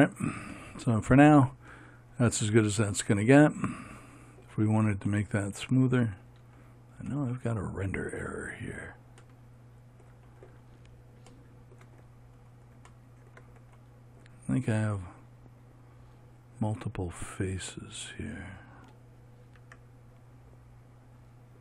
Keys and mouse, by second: 20.2 Tab.